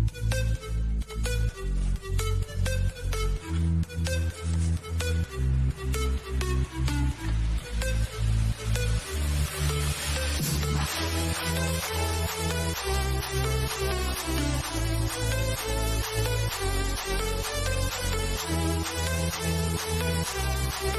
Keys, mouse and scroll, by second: 0.3 click, 0.9 scroll up 1, 3.7 click, 4.5 scroll down 1, 5.1-8.9 shift+middle drag, 8.9 click, 9.5-10.0 scroll down 1, 10.9-12.9 drag, 12.9-13.8 scroll down 1, 13.8 click, 15.1-15.4 scroll down 1, 15.4-16.8 drag, 16.8-17.5 scroll up 1, 17.5-20.9 drag.